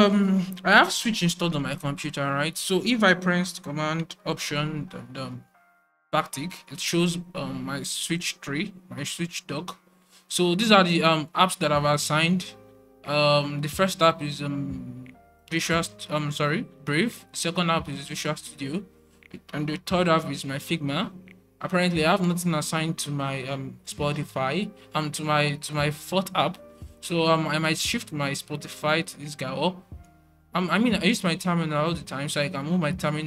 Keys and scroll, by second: 5.2 alt+super+`.